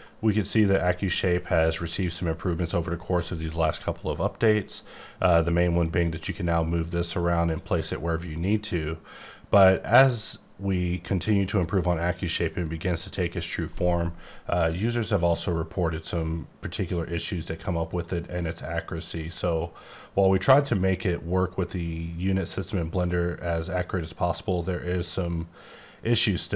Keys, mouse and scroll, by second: 5.6 click, 8.5 click, 13.7 right click, 17.9 click, 18.8 click.